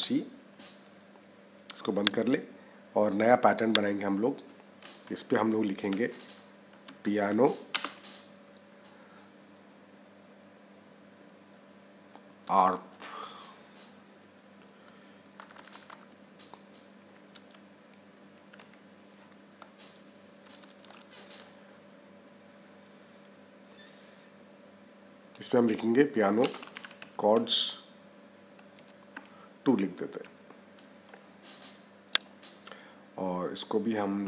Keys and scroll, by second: 5.7 Caps_Lock, 6.1 p, 7.6 space, 12.3 a, 15.3 BackSpace, 17.2 a, 18.2 r, 20.3 BackSpace, 26.3 space, 26.6 c, 28.6 s, 30.1 2.